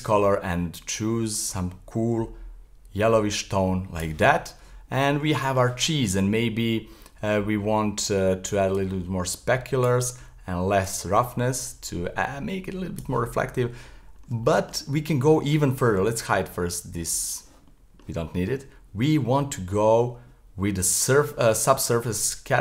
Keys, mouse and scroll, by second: 4.4-4.7 middle drag, 4.7 scroll up 3, 5.3 shift+middle click, 6.2-8.8 scroll down 6, 8.8-13.3 drag, 13.3-14.1 middle drag, 14.1-14.5 scroll down 2, 14.5-17.2 shift+middle drag, 17.2 click, 17.7-19.2 middle drag, 19.2-20.3 scroll up 3, 20.3-21.5 scroll up 3, 21.5-22.6 scroll up 1.